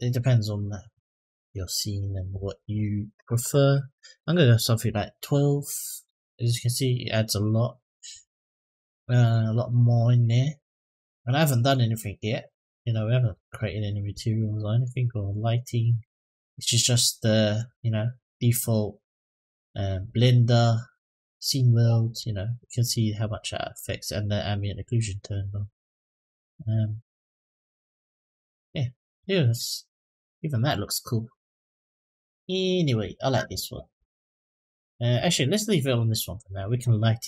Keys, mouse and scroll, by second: 10.8-11.6 middle drag, 11.8-12.6 scroll up 3, 12.6-13.1 scroll up 3, 13.3-13.9 shift+middle drag, 14.3-14.6 middle drag, 14.9-15.7 scroll down 3, 17.8 click, 18.8 click, 19.7-28.9 drag, 31.6-36.4 drag.